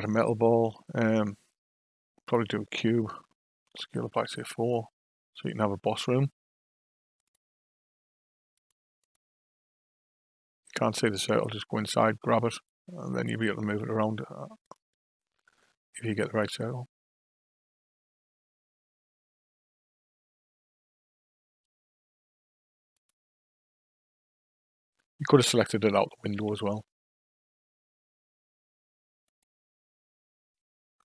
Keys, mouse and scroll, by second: 3.6 s, 7.2 click, 8.5 click, 9.0 click, 11.3 click, 13.9 g, 22.9 click, 26.3 g.